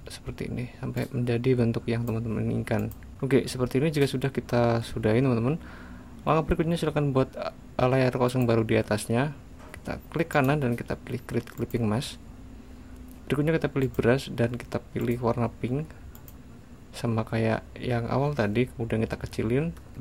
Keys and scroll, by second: 18.0 [.